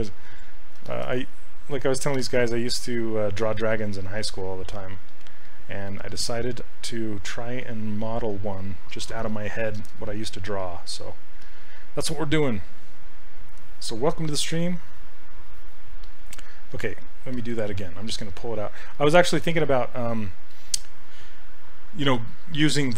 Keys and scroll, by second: 16.8 s.